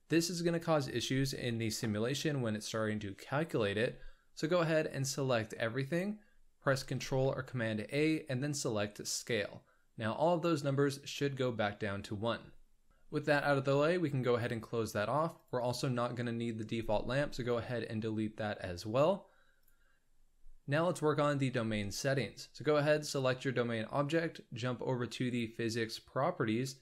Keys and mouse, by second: 4.9-5.9 drag, 5.9 middle click, 7.0 ctrl+a, 12.9 n, 13.3 middle click, 16.6 x, 25.2 click.